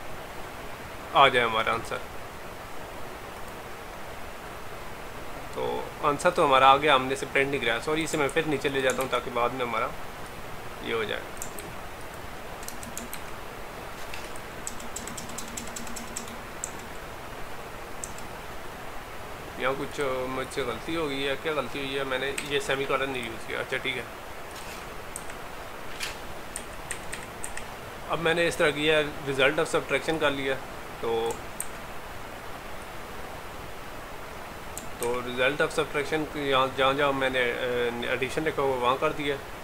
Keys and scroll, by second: 8.4 ctrl+x, 9.0 ctrl+v, 11.6 ctrl+c, 13.2 ctrl+v, 31.7 ctrl+c, 35.1 ctrl+v.